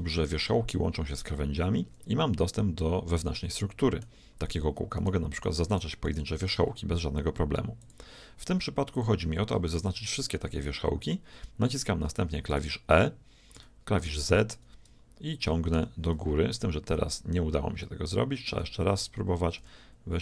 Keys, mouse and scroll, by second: 2.5-4.4 middle drag, 5.0-7.8 right drag, 8.3-9.7 drag, 9.5 a, 9.7 a, 12.5 e, 13.5 z, 15.7 Escape, 17.9-19.8 middle drag, 19.6 g.